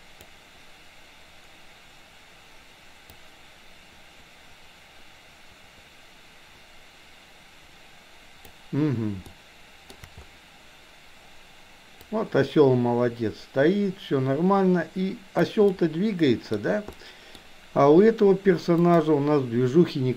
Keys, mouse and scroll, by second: 3.1-8.6 drag, 9.3-9.9 shift+middle drag, 12.0-15.4 drag, 15.6-16.5 middle drag, 16.9-17.4 middle drag, 18.9 drag.